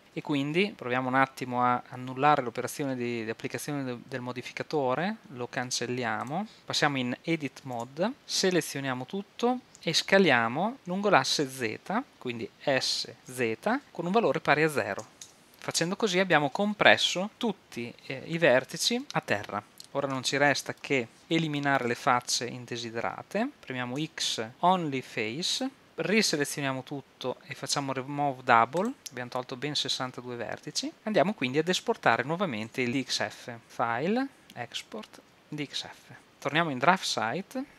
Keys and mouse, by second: 0.7 super+z, 6.6 shift+z, 7.8 Tab, 13.0 s, 19.7 click, 19.8 middle click, 21.2 ctrl+Up, 21.2 KP_7, 24.0 x, 26.4 a, 28.8-32.7 drag, 32.7 Tab, 34.4-36.1 drag.